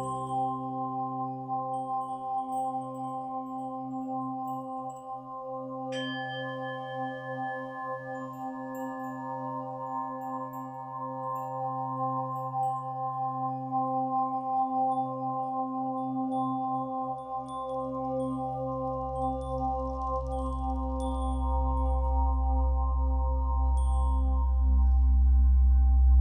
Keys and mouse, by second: 1.0 click, 2.0 KP_1, 2.2 KP_0, 2.3 KP_0, 2.5 Return, 4.4 click, 7.2 click, 9.1 click, 13.3 click, 13.5 click, 15.6 click, 15.8 click, 18.1 click, 19.3 click, 19.4 click, 20.7 click, 20.9 click, 23.9 Delete, 24.0 Delete, 24.3-24.8 typing.